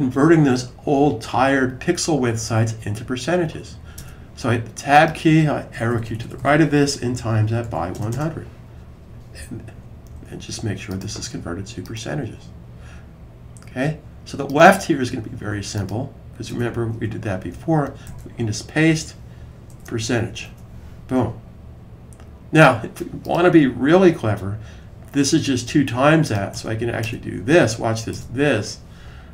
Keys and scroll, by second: 5.6 Right, 5.7 Right, 5.9 Right, 6.1 Right, 6.2 Right, 6.8-8.5 typing, 9.9-10.6 typing, 12.0-12.8 typing, 19.7 typing.